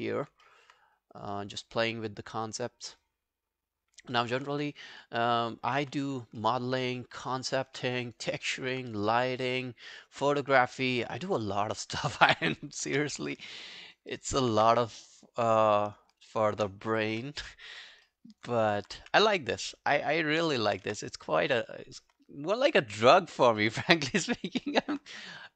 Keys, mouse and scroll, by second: 0.5 alt+middle click, 4.2 alt+middle click, 4.4 alt+right click, 4.6 space, 5.8 space, 6.4 alt+middle click, 6.8 alt+right click, 7.1 alt+click, 7.8 alt+middle click, 8.0 alt+right click, 8.3 alt+click, 8.8 alt+right click, 11.0 alt+middle click, 11.3 alt+right click, 11.6 alt+click, 13.2 alt+click, 13.6 alt+middle click, 13.9 alt+right click, 14.1 alt+middle click, 14.4 alt+right click, 14.6 q, 16.1 shift+click, 16.5 shift+click, 17.1 Delete, 17.8 scroll down 1, 18.1 alt+middle click, 18.3 alt+right click, 18.6 alt+click, 19.0 right click, 20.5 alt+click, 20.9 space, 22.0 space, 22.8-23.2 scroll down 2, 23.3 scroll up 1, 23.6 alt+middle click, 23.9 alt+right click, 24.1 alt+middle click, 24.4 alt+right click, 24.7 alt+middle click.